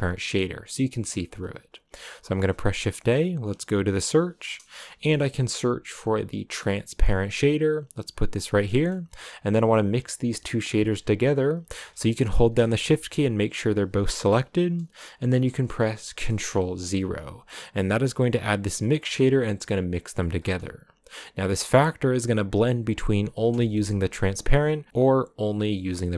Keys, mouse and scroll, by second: 9.3-12.5 drag, 16.1 ctrl+0, 17.9 click, 18.9 middle click, 19.2-20.3 scroll up 2, 21.1-23.5 drag, 23.5 shift+middle click, 23.6 shift+scroll up 3, 24.8-26.1 drag.